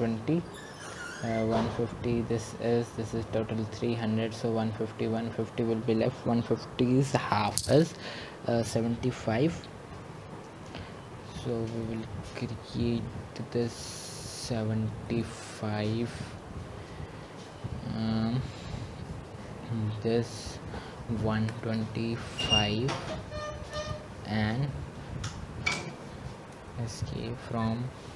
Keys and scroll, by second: 23.8-24.5 typing, 26.9 Return.